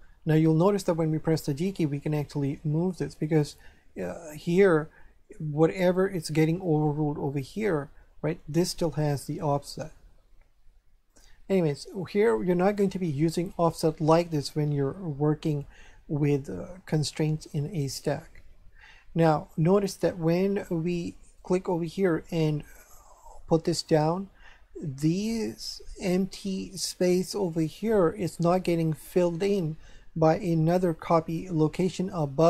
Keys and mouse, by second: 1.2 g, 3.4 right click, 11.1 click, 21.4 click.